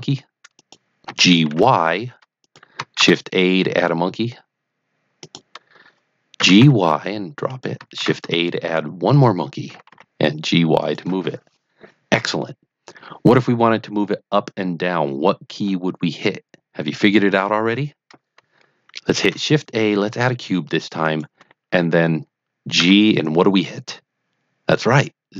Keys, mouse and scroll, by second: 0.5 click, 1.0 g, 1.4 y, 2.4 click, 2.9 shift+a, 5.2 click, 6.3 g, 6.6 y, 7.4-7.7 drag, 7.9 shift+a, 9.1 click, 9.6 g, 10.0 y, 10.7 click, 19.2 shift+a, 21.0 click, 22.7 g, 25.3 z.